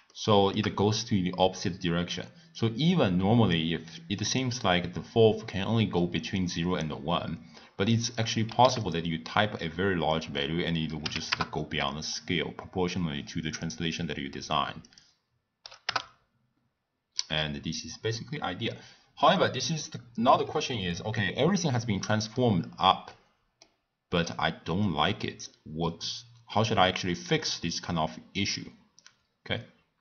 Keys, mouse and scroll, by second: 0.1-2.5 shift+middle drag, 2.5-7.0 drag, 8.1 click, 10.1-13.1 drag, 14.9-17.1 drag, 17.1-19.3 middle drag, 19.3-20.8 drag, 20.8-21.5 scroll down 1, 21.5 scroll up 1, 21.6-22.5 middle drag, 22.5-23.1 scroll down 2, 23.1-26.1 middle drag.